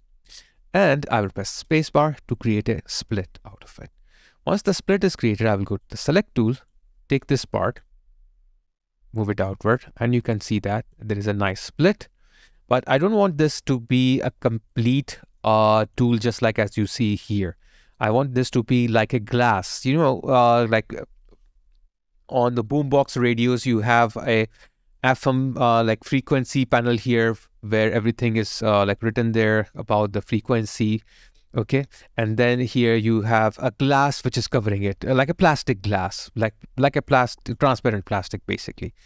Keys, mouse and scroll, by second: 1.7 space, 7.5 alt+click, 11.4 alt+right click, 12.6 alt+click, 14.1 alt+click, 14.3 alt+right click, 14.7 alt+click, 15.2 alt+middle click, 15.5 alt+click, 25.0 alt+click, 29.1 alt+middle click, 32.0 alt+click, 36.0 alt+right click, 36.3 alt+click.